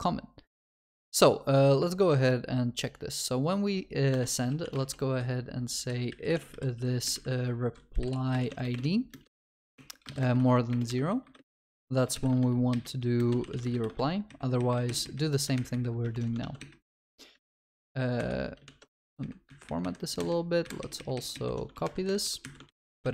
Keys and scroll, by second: 15.6 alt+shift+Up, 17.0 ctrl+y, 17.5 ctrl+alt+f, 18.6 Escape, 18.7 ctrl+alt+shift+l, 21.7 ctrl+s.